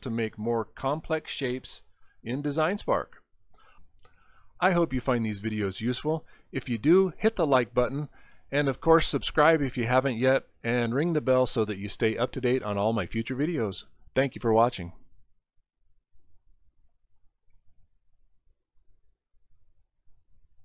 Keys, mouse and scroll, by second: 0.6 middle click, 20.5 click.